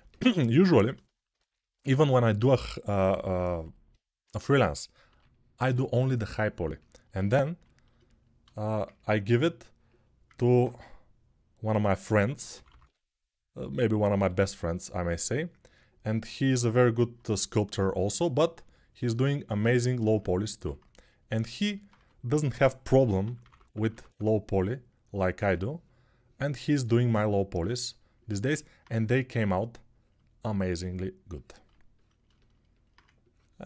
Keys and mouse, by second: 0.0-1.3 ctrl+alt+right drag, 1.3-19.8 alt+drag, 4.8 3, 11.8 x, 12.3 [, 12.4 [, 13.9 g, 19.8-23.8 alt+right drag, 21.7 2, 23.0-23.9 typing, 23.8-33.6 drag, 25.2 1.